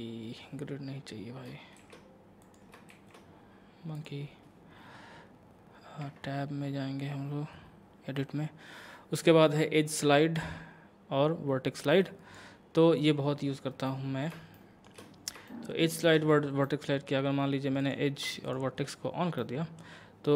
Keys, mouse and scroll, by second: 1.8 shift+a, 2.4 click, 2.5 click, 2.9 a, 4.0 click, 6.0 Tab, 6.7-7.5 scroll down 1, 10.4-13.0 drag, 13.4 scroll up 1, 13.9 middle click, 15.0 shift+scroll up 1, 15.5 shift+middle click, 16.0 shift+scroll up 1, 16.7 middle click, 17.8 click, 18.5 shift+click, 19.4-20.3 middle drag.